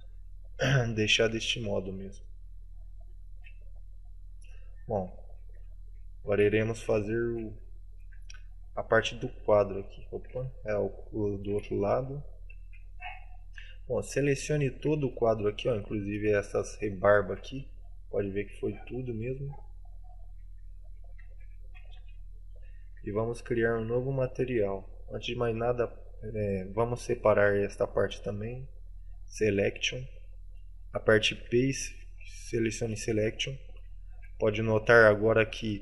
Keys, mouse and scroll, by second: 1.6 right click, 1.6 middle click, 1.6 KP_Decimal, 1.6 shift+space, 2.3 middle click, 2.9 scroll up 1, 3.4 a, 3.6 middle click, 5.0-5.3 scroll up 2, 5.3 shift+middle click, 5.7 middle click, 6.1 shift+middle click, 6.6 middle click, 7.2 shift+middle click, 7.7 right click, 8.1 Tab, 8.4 right click, 8.8 Tab, 9.0 right click, 9.4 Tab, 9.7 right click, 10.1 middle click, 10.5 shift+middle click, 11.3 middle click, 12.1 right click, 12.8 KP_Decimal, 13.5 middle click, 13.8-14.3 scroll up 2, 14.3 middle click, 16.1 alt+shift+right click, 16.6 middle click, 17.3 z, 17.7 middle click, 18.5 z, 18.8 middle click, 19.6 z, 19.9 middle click, 20.6 alt+z, 20.9 middle click, 21.3 alt+z.